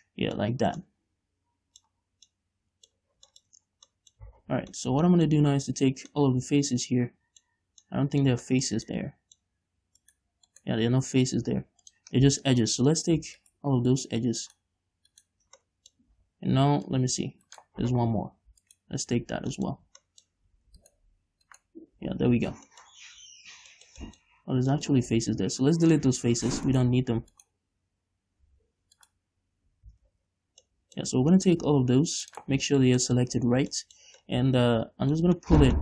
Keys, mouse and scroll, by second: 0.3-4.6 middle drag, 0.9-1.4 scroll up 2, 2.5 scroll down 2, 3.3-3.7 scroll up 2, 4.2 scroll down 2, 4.6 z, 4.9 scroll down 2, 5.1-9.8 shift+middle drag, 7.9-8.3 scroll up 2, 10.4 right click, 10.9 right click, 12.2 click, 12.9 alt+right click, 13.8 alt+shift+right click, 14.3 alt+shift+right click, 14.8 alt+shift+right click, 16.0 middle click, 16.5 z, 17.2 click, 18.0 right click, 18.2 z, 19.0 alt+shift+right click, 19.9 middle click, 20.1 scroll up 1, 20.4 shift+middle click, 21.2 alt+shift+right click, 21.8 right click, 22.5 scroll down 2, 22.7 z, 23.1 middle click, 23.3 scroll up 2, 23.5 z, 23.7 middle click, 24.4-27.1 middle drag, 24.7 z, 25.4 x, 27.1 alt+right click, 27.7-29.2 alt+shift+right drag, 29.4 alt+shift+right click, 30.4 z, 31.1 middle click, 32.0 click, 32.8 right click, 32.9 scroll down 1, 33.0 shift+middle click, 33.7 z, 34.6 middle click, 34.8-35.8 middle drag.